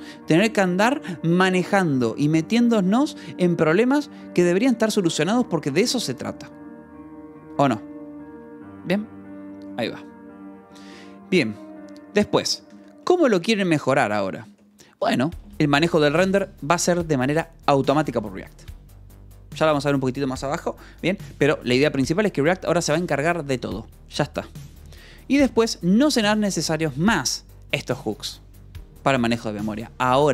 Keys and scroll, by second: 12.2-13.5 typing, 14.3 Escape, 14.5 j, 15.0 k, 15.9 shift+v, 25.2 j, 25.9 shift+v.